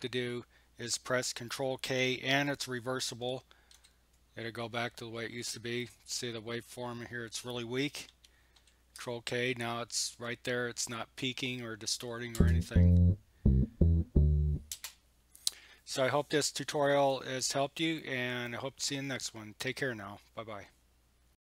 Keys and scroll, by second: 3.8 ctrl+k, 8.6 ctrl+k, 12.4 space, 14.7 space.